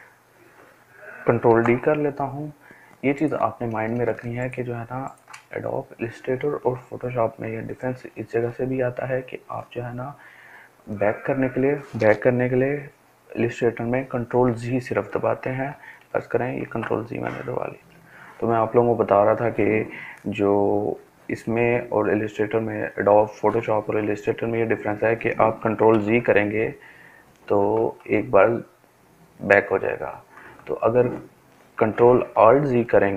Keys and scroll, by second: 1.5 ctrl+d, 4.2 ctrl+space, 4.7 ctrl+space, 4.7 ctrl+space, 4.7 ctrl+space, 4.9 ctrl+space, 16.4 ctrl+z, 24.5 ctrl+z, 31.1 ctrl+alt+z, 32.4 ctrl+alt+z, 33.0 ctrl+alt+z.